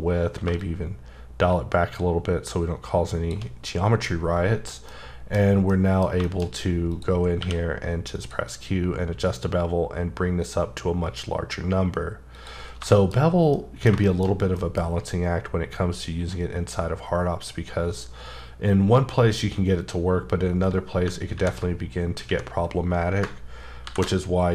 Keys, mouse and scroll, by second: 0.9-3.4 shift+drag, 4.6 scroll down 1, 4.9 middle click, 5.3-5.7 scroll down 3, 5.7 middle click, 6.4 shift+scroll up 3, 6.9 click, 7.4 q, 8.1 click, 12.3 click, 12.6 scroll down 3, 12.9 shift+scroll up 1, 13.0 shift+middle click, 13.1 shift+scroll down 2, 13.5 middle click, 14.3-17.3 scroll up 6, 14.6 middle click, 21.0 ctrl+scroll up 4, 23.8 ctrl+b.